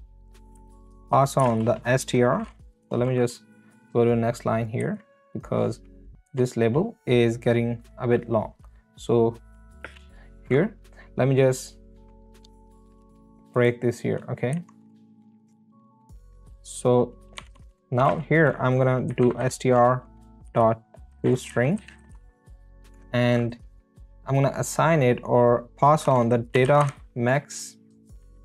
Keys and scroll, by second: 0.5 space, 1.6 space, 2.8 Return, 4.8 Right, 6.3 BackSpace, 9.8 space, 14.5 Right, 15.1 Return, 15.4 space, 15.5 Down, 15.7 BackSpace, 16.3 space, 16.4 Left, 17.5 Right, 18.1-22.6 typing, 22.9 Return, 26.3-28.4 typing.